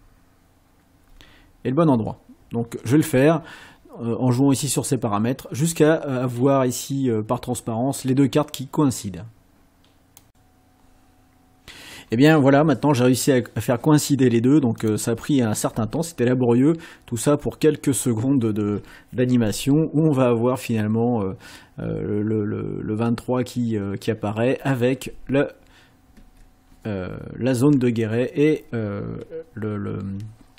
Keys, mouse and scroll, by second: 10.3 click, 14.9 click, 15.8 space, 26.2 space.